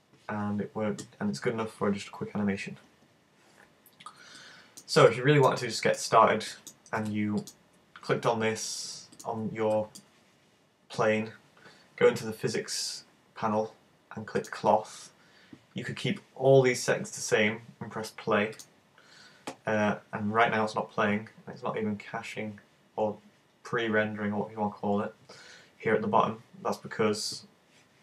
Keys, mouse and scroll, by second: 4.5 middle click, 5.1 middle click, 5.7 shift+middle click, 6.6 middle click, 7.5 right click, 9.2 right click, 9.7 middle click, 14.4 click, 18.7 click.